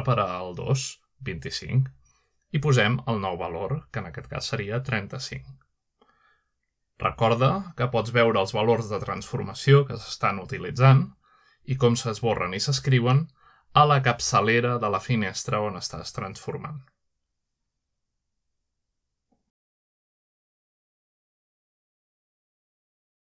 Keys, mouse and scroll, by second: 1.4 BackSpace, 3.9 3, 4.9 5, 6.2 Return, 7.1-8.1 scroll down 1, 8.1-9.7 shift+scroll up 2, 8.5 typing, 8.7 shift+middle click, 9.9-11.0 scroll up 1, 11.0-11.6 shift+middle drag, 11.0 typing, 14.7 g, 16.3 click, 17.8 g, 18.8 z, 20.0 1, 20.6 2.